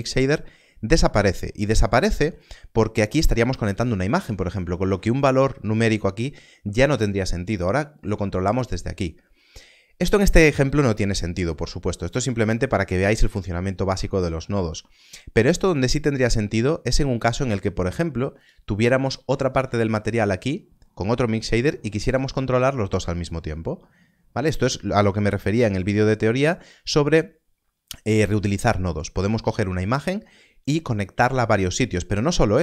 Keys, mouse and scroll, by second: 1.0-1.6 scroll up 1, 1.6-3.6 scroll down 1, 7.7 click, 15.5 click, 18.4 click, 19.4 shift+d, 20.1 click, 25.0 click.